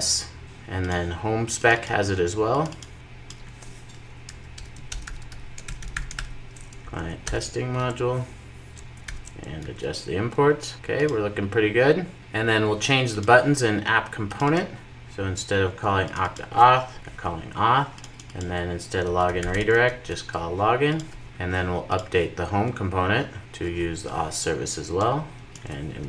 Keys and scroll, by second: 7.2 Return, 7.7 super+s, 8.9 alt+super+l, 9.5 super+s, 17.0 super+r, 19.8 super+s, 21.7 super+s, 25.5 super+r.